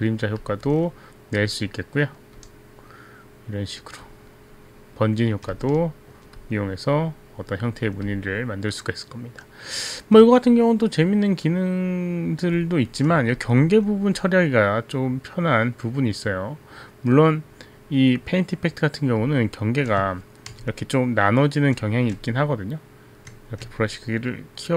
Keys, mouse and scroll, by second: 0.5 click, 1.7 click, 2.5 click, 4.2 click, 5.7 alt+click, 8.2 alt+click, 12.7 click, 14.7 click, 20.4 right click, 20.5 b, 21.6 right click, 22.3 b, 23.7 right click, 24.4 click, 24.4 b.